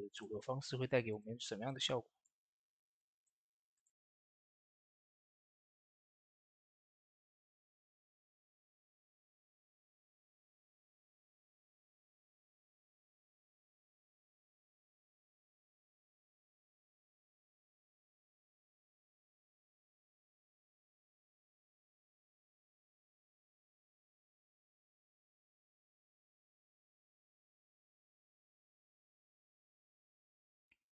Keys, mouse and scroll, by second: 0.0 click, 0.4 scroll up 1, 1.0 click, 1.5 middle click, 2.0-8.0 drag, 8.8 shift+middle click, 9.2 shift+click, 9.7-17.5 shift+drag, 18.4 middle click, 18.9-30.9 drag.